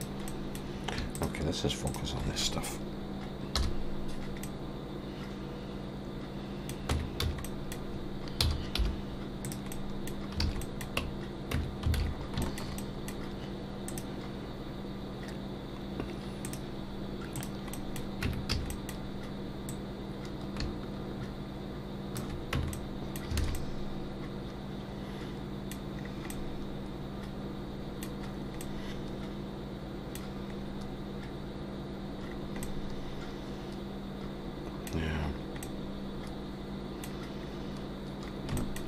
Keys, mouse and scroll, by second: 0.3 middle click, 1.1 shift+click, 1.9 click, 3.5 /, 4.4 middle click, 6.9 Tab, 7.2 a, 7.4 middle click, 8.4 s, 9.7 middle click, 10.4 alt+a, 10.6 middle click, 11.5 Tab, 12.0 alt+a, 12.1-12.4 scroll up 3, 12.4 shift+middle click, 12.8 middle click, 17.3 click, 17.7 middle click, 18.2 Tab, 18.5 a, 18.7 middle click, 19.7 click, 22.5 Tab, 22.7 middle click, 23.4 alt+a, 23.5 middle click, 26.0-26.3 scroll down 2, 26.3 middle click, 28.3-29.0 scroll up 3, 28.6 middle click, 30.6-31.5 scroll up 1, 32.2-33.2 scroll down 3, 32.6 middle click, 35.1-35.6 scroll down 2, 37.5-38.0 scroll up 2, 38.3 scroll up 2, 38.6 shift+middle click.